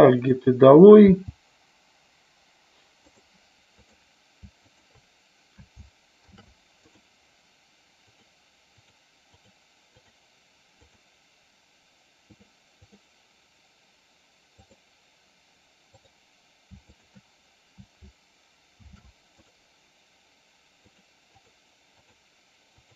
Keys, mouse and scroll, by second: 0.3 click, 1.3 g, 3.2 click, 4.8 shift+click, 6.3 ctrl+shift+c, 8.0 click, 9.5 click, 10.0 click, 10.9 click, 12.4 click, 17.0 shift+click, 18.9 ctrl+shift+c, 21.4 click, 22.1 click.